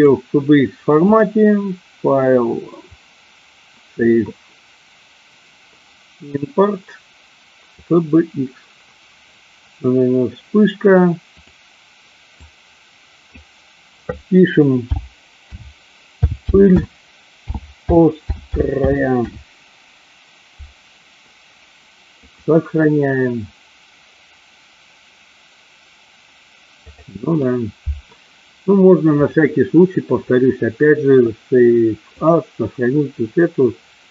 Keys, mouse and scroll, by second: 1.1-8.1 drag, 29.2-32.4 drag.